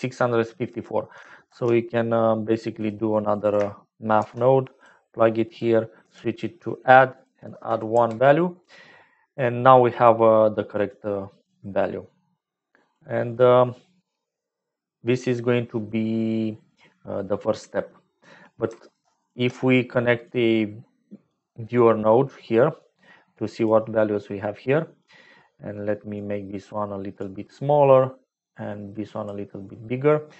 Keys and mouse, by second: 1.4 shift+a, 3.2 click, 4.1 shift+d, 5.4 click, 7.5 click, 9.2 click, 9.6 click, 10.8 click, 12.3 click, 15.3 middle click, 20.3 click, 22.7-23.9 drag, 26.1 click.